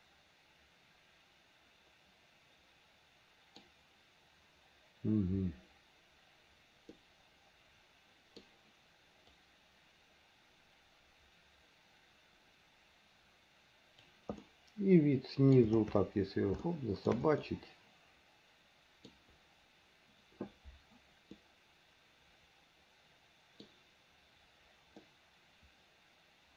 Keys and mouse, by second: 7.1-8.5 middle drag, 9.5-14.2 drag, 14.5-15.7 middle drag, 16.7 shift+middle click, 17.5-19.2 middle drag, 21.5-23.7 middle drag, 25.2-26.5 middle drag.